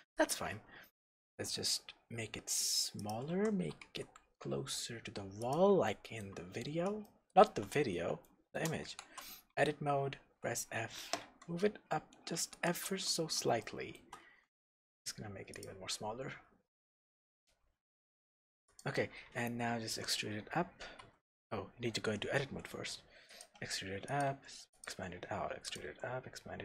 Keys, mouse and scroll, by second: 0.2 click, 1.2 s, 3.1 click, 3.3 g, 5.5 click, 5.9-12.7 shift+middle drag, 6.6-7.0 scroll up 1, 7.8-8.2 scroll up 1, 9.0 Tab, 9.6 f, 10.2 Tab, 11.3 g, 12.7 shift+click, 13.1-13.6 scroll up 1, 13.6-15.7 shift+middle drag, 14.2 s, 15.7 click, 15.9-16.7 scroll down 1, 17.3 scroll up 1, 18.3 s, 18.8 click, 19.8 e, 21.0 Tab, 22.4 e, 23.4 click, 23.5 s, 24.2 click, 24.3 e, 24.8 click, 25.6 s, 25.8 click, 25.9 e.